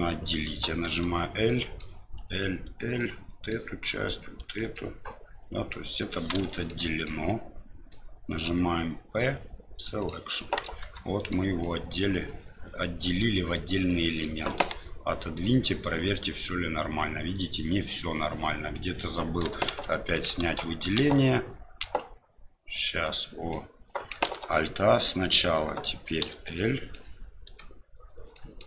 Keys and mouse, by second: 1.6 middle click, 3.0 middle click, 4.8-5.8 middle drag, 6.6 middle click, 6.9 middle click, 8.0 middle click, 9.2 p, 10.3 middle click, 10.8 Tab, 11.2 right click, 11.6-14.2 middle drag, 14.6 g, 19.7 ctrl+z, 20.4 ctrl+z, 21.0 ctrl+z, 21.8 ctrl+z, 23.0 middle click, 24.2 alt+a, 26.7 middle click, 27.9 middle click, 28.5 middle click.